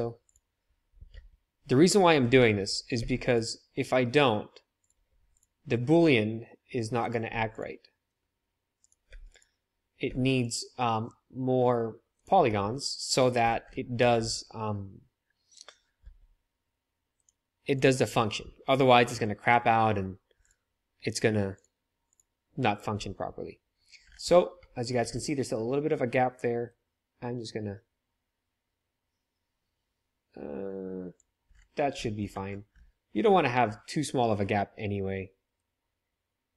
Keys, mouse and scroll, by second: 1.1 ctrl+3, 2.5 Tab, 2.9 ctrl+r, 5.0 ctrl+r, 7.2 ctrl+r, 9.0 ctrl+r, 10.0 ctrl+r, 16.0 Tab, 17.2-20.5 drag, 21.6-36.5 drag.